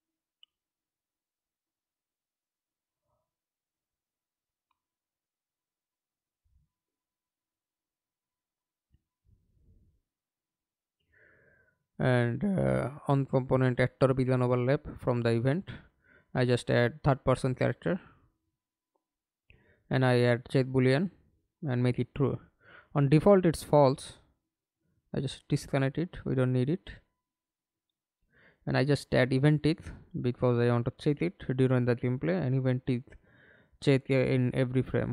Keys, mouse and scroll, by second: 0.1 right click, 0.8 right click, 6.3-7.3 scroll up 2, 7.3-7.9 scroll up 1, 11.0-14.0 typing, 14.9 Up, 15.7 Return, 17.6 right click, 19.0 double click, 22.5 right click, 23.4 right click, 24.8 alt+click, 25.3 right click, 26.0 right click, 26.6-28.1 typing, 28.3 Return, 29.1-29.4 scroll up 2, 31.9 right click, 32.9-34.3 typing.